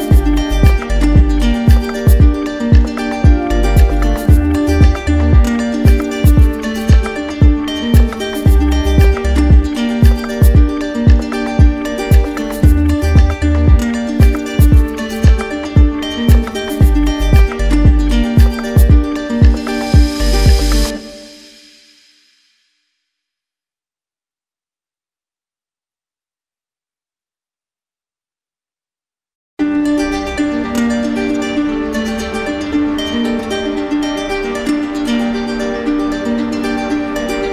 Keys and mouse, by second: 1.8 shift+right click, 11.3 ctrl+click, 15.2 ctrl+click, 17.0 ctrl+click, 19.8 ctrl+click, 22.6 ctrl+click, 23.2 alt+right click, 25.9 click, 26.8 click, 28.1 right click, 29.5 ctrl+click, 31.5 z, 33.4-34.4 right drag, 34.7-35.7 drag, 35.7 shift+right click.